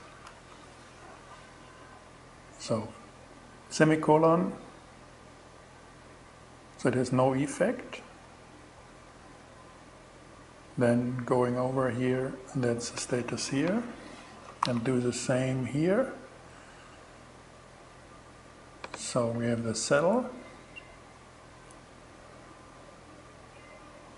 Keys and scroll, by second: 14.1 super+c, 19.4 Return.